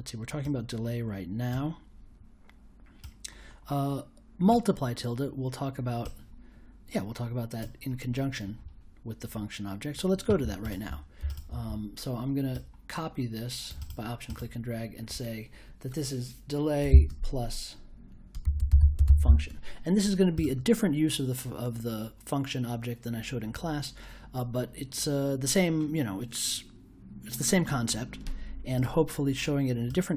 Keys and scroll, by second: 16.8 shift+=, 18.2-19.7 typing.